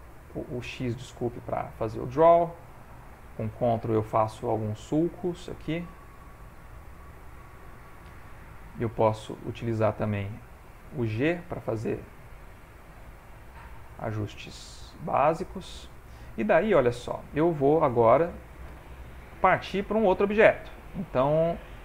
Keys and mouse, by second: 0.4 click, 1.3 click, 1.6 click, 2.3 middle click, 2.9 ctrl+middle click, 3.5-4.0 ctrl+click, 3.8 ctrl+click, 4.0 click, 4.3 ctrl+click, 5.2 ctrl+click, 5.7 ctrl+click, 6.2 ctrl+click, 6.6 middle click, 9.2 click, 10.2 f, 11.1 g, 12.5 click, 14.2 click, 15.7 click, 16.2 middle click, 18.1 middle click, 19.0 ctrl+middle click, 19.2 ctrl+middle click, 20.6 click, 21.5 click.